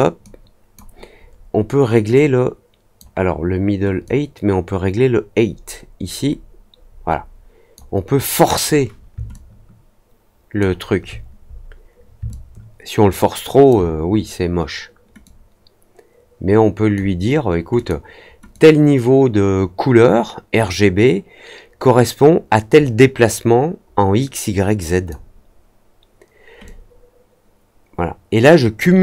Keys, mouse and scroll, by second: 0.2-0.7 drag, 2.1 click, 4.0-7.7 drag, 9.3-10.5 alt+drag, 11.0-11.5 scroll down 2, 11.5 middle click, 12.2-13.6 alt+drag, 15.2-16.9 drag, 17.7 click, 18.5-25.0 drag, 26.6-28.7 drag.